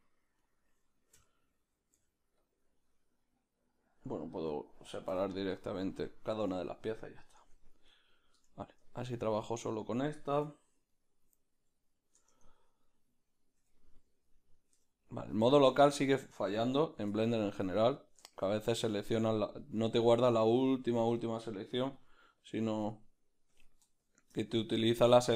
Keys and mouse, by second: 0.5 right click, 1.2 l, 2.7 p, 7.6 Tab, 7.9-9.0 right drag, 9.0 Tab, 9.0 b, 9.4-12.9 middle drag, 10.3 \, 12.3 Tab, 12.9 right click, 13.6 \, 14.3 right click, 14.7 \, 16.7 \, 17.7 Tab, 17.7 b, 17.9-19.6 middle drag, 19.9 middle click, 20.7-25.3 drag, 22.0 f, 24.5-25.3 middle drag.